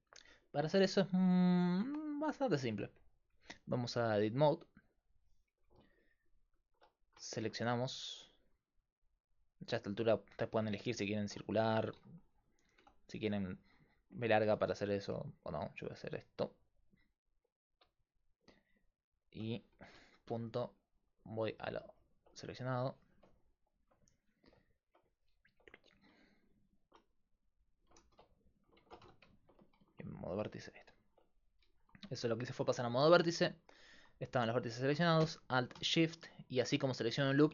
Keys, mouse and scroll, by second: 2.0 right click, 7.7-9.2 right drag, 8.7 click, 8.7 middle click, 10.5 click, 10.9 click, 11.3 ctrl+a, 12.0 a, 12.8 b, 14.6 ctrl+z, 20.0 KP_Decimal, 22.7-25.1 right drag, 25.1-27.2 drag, 26.6 middle click, 26.6 right click, 27.6 right click, 28.0 ctrl+z, 28.8 ctrl+Tab, 30.1 click, 30.6 click.